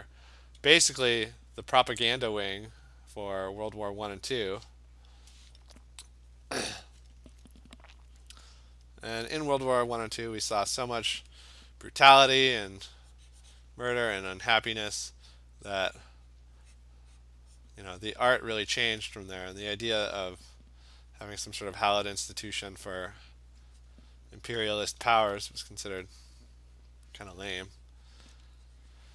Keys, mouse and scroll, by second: 0.2 click, 1.2 alt+click, 1.8 click, 3.4 click, 5.4 alt+click, 6.4 click, 8.8 click, 10.7 click, 12.5 click, 13.6 click, 14.0 click, 14.9 alt+click, 15.1 alt+click, 16.4 click, 17.7 click, 18.1 click, 18.7 click, 19.0 alt+click, 19.4 alt+click, 20.0 click, 21.5 click, 22.1 click, 23.2 click, 23.4 click, 24.3 click, 24.4 alt+click, 24.6 ], 24.8 ], 25.1 ], 25.2 ], 25.8 click, 26.8 click, 27.5 click, 27.8 click, 28.3 click, 29.0 click.